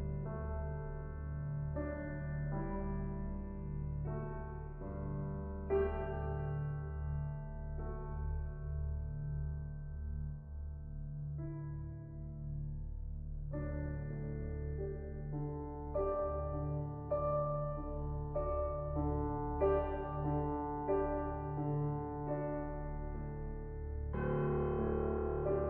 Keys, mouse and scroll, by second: 5.5-6.8 drag, 9.9 shift+a, 15.8-18.8 drag, 19.0-21.4 middle drag, 21.4-24.4 drag, 25.4-25.6 drag.